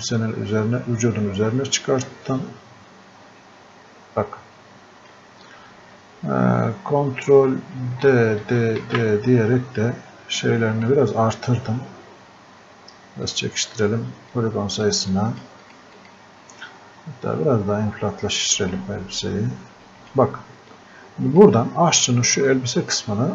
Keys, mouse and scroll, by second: 8.0 ctrl+d, 10.9 click.